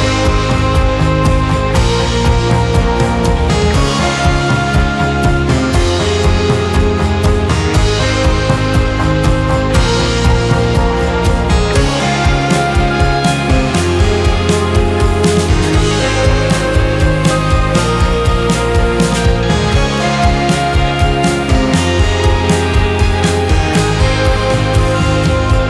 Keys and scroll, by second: 6.0 ctrl+g, 6.7 c, 7.0 e, 7.4 Escape, 15.7 space, 16.3 e, 19.5 Escape.